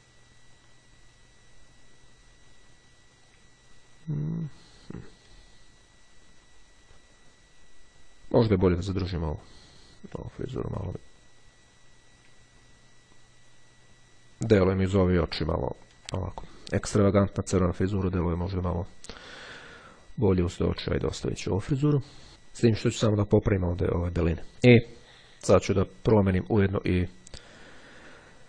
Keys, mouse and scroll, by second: 3.7-4.2 ctrl+scroll down 2, 10.1 click, 12.6-13.2 ctrl+scroll down 2, 15.5-16.0 ctrl+scroll up 2, 18.1 click, 20.6 click, 26.3 click, 27.6 click.